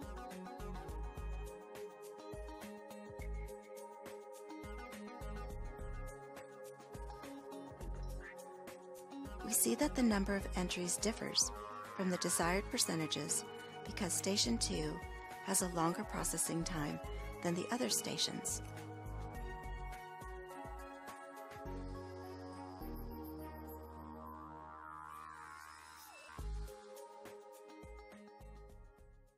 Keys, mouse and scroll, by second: 4.2 F6.